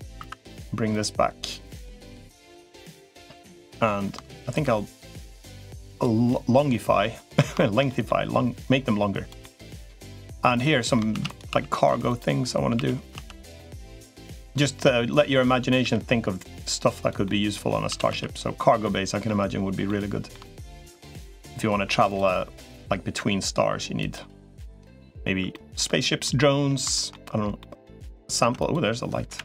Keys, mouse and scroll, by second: 0.1 2, 0.7 click, 1.3 click, 2.3 middle click, 3.1 3, 4.9-5.9 drag, 6.1 middle click, 6.8 middle click, 7.4 shift+middle click, 7.7 middle click, 8.5 click, 9.2 middle click, 10.3 click, 10.6 middle click, 10.9 shift+d, 11.3 s, 12.5 s, 13.9 middle click, 14.9 click, 15.7 e, 17.0 middle click, 17.7 s, 18.6 middle click, 19.6 middle click, 22.5-23.9 drag, 23.9 middle click, 24.5 middle click, 25.3 middle click, 26.0 middle click, 26.7 shift+middle click, 27.4 middle click, 28.3 Tab, 29.1 Delete.